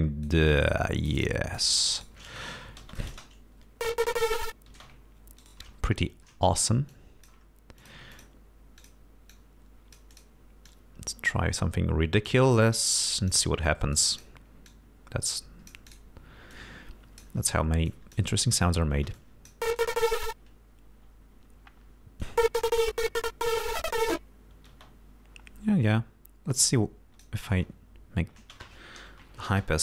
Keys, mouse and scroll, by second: 1.3 click, 2.0 shift+right click, 2.3 shift+space, 3.0 click, 4.8 space, 5.5 shift+right click, 6.9 click, 7.8 click, 8.2 click, 8.8 click, 9.4-10.4 drag, 10.7-12.8 drag, 13.3-14.4 drag, 14.7-16.2 drag, 16.6 click, 17.9 click, 19.0 space, 19.2 click, 19.8 click, 22.3 click, 24.8 space, 26.7 click, 27.6 space, 28.4 space, 29.2 Home, 29.5 space.